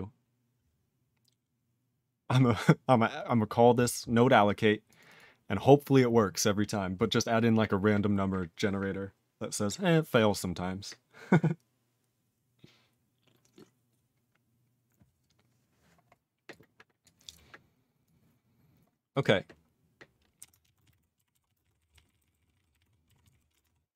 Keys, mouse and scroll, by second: 20.4 q, 20.7 ctrl+a, 20.8 ctrl+space, 20.8 ctrl+e, 20.9 ctrl+g, 21.4 ctrl+s, 21.5 ctrl+a, 21.6 ctrl+space, 21.6 ctrl+e, 21.8 ctrl+n, 22.1 ctrl+e, 22.3 ctrl+n, 22.4 ctrl+e, 22.5 ctrl+n, 22.6 ctrl+e, 22.7 ctrl+g, 22.8 ctrl+e, 23.3 ctrl+s, 23.3 ctrl+n, 23.5 ctrl+space, 23.6 ctrl+g.